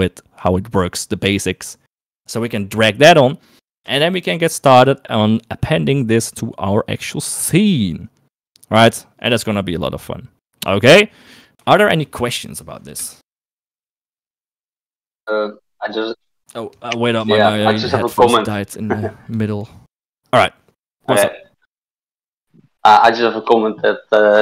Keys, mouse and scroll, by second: 4.5 shift+middle click, 9.8 shift+middle click, 12.0 shift+middle click.